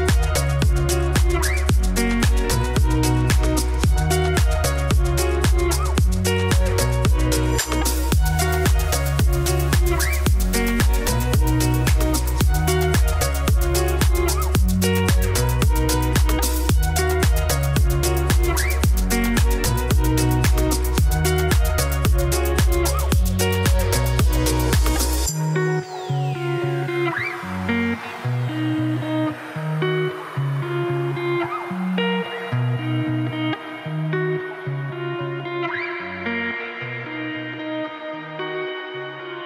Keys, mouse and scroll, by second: 0.0-2.4 typing, 2.1 middle click, 2.5 shift+click, 3.0 shift+click, 3.3 ctrl+b, 5.0 click, 5.7 shift+middle click, 5.8-6.1 scroll up 1, 6.1 g, 8.3 shift+click, 8.7 g, 10.1 a, 10.2 middle click, 10.3 alt+e, 11.2 ctrl+z, 11.7 shift+n, 12.1 alt+e, 13.8 Tab, 13.9 scroll down 1, 14.2 ctrl+s, 17.6 click, 18.0 middle click, 18.7 Tab, 18.8 2, 18.9 click, 19.2 shift+s, 19.4 Tab, 19.6 shift+a, 21.5 1, 21.9 Tab, 22.0 1, 22.2 s, 23.3 g, 24.0 Tab, 24.7 click, 25.6 scroll up 1, 25.8 Tab, 26.5 f, 26.9 middle click, 27.3 e, 27.7 middle click, 28.0 a, 28.1 s, 28.9 middle click, 29.1 g, 29.8 shift+d, 31.0 Tab, 31.1 middle click, 31.6 KP_3, 32.2 r, 34.4 g, 36.1 g, 36.9 middle click, 37.3 click, 37.5 scroll down 4, 37.6-38.8 middle drag, 38.9 scroll up 2, 39.1 click, 39.2 Tab, 39.3 3.